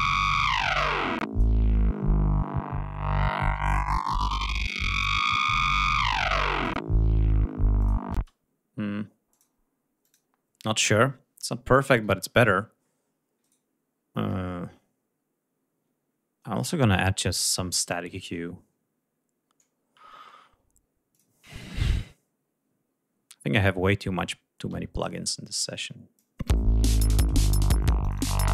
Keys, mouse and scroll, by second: 0.4 click, 3.5 click, 4.6-6.4 drag, 7.4 click, 23.8 click, 25.1 click, 26.1 l, 27.4 click.